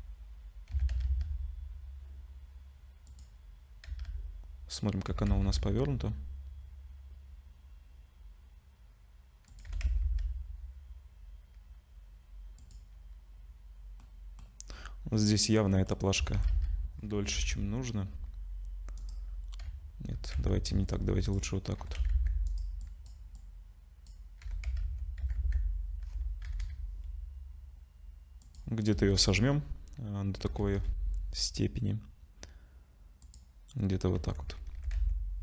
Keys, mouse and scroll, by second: 0.7 s, 3.9 z, 5.1 r, 9.7 g, 14.0 middle click, 14.7-15.5 scroll down 3, 15.5 middle click, 15.5 scroll down 1, 16.2 s, 19.6 z, 20.4 Tab, 20.7 1, 20.9 click, 21.8 g, 22.8 click, 23.4 click, 24.4 g, 28.9 KP_0, 30.0-30.4 scroll up 2, 30.4 g, 33.9 scroll down 2, 34.2 Tab, 34.5 scroll up 2, 34.8 r.